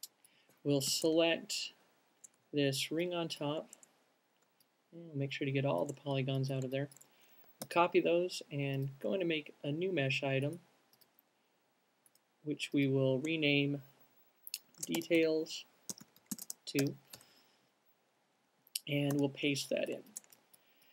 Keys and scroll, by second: 1.6 alt+shift+fn+Up, 7.6 alt+shift+super+fn+Up, 7.9 alt+shift+super+fn+c, 14.9-18.3 typing, 18.8 alt+super+v, 20.3 alt+shift+super+v.